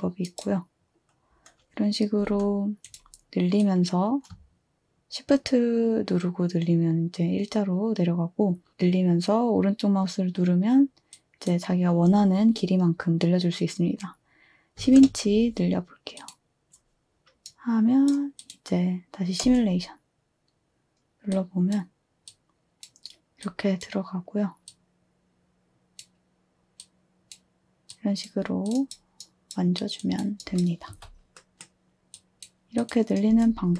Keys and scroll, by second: 14.6-15.4 typing, 19.4 space, 30.9 2, 33.3 space.